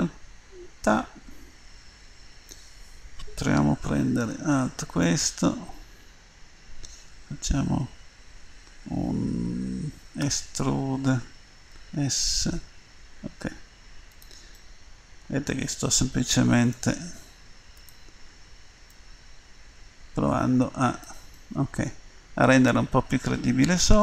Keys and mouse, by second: 2.0-5.0 middle drag, 5.0-9.5 right drag, 10.2 e, 14.6-16.5 middle drag, 17.0 s, 18.9-21.0 drag, 21.4 click, 21.6 middle click, 22.8 middle click.